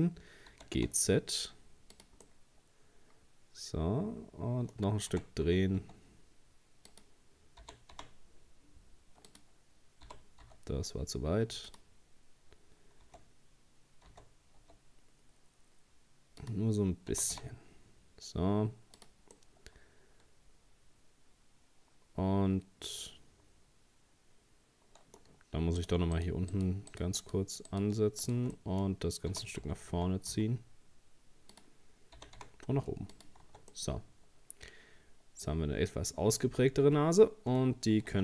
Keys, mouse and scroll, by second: 0.5 g, 2.3-5.1 middle drag, 5.1 r, 7.6 g, 10.1 g, 13.0 r, 17.1 g, 19.4-22.5 middle drag, 25.8 right click, 26.2 shift+right click, 26.5 shift+right click, 26.9 shift+right click, 27.2 shift+right click, 27.7 shift+right click, 28.2 shift+right click, 28.6 middle click, 29.3 g, 32.2 g, 33.4 Tab, 33.7-36.8 middle drag, 37.8 scroll down 1, 38.1 Tab.